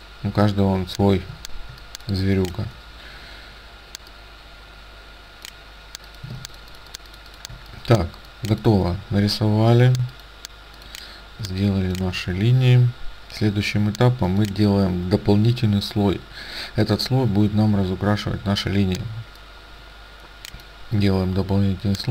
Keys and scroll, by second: 6.5 ctrl+alt+space, 11.5 space.